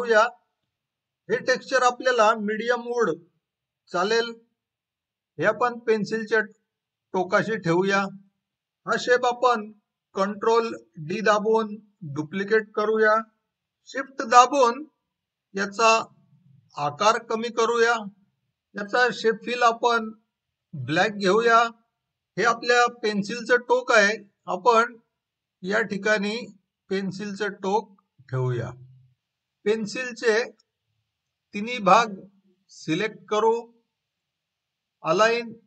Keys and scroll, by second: 10.9 ctrl+d.